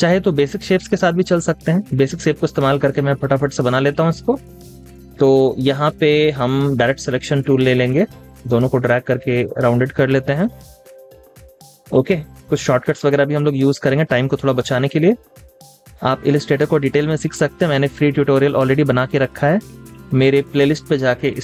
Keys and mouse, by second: 0.0 typing, 11.2 typing, 12.7 typing, 15.3 typing.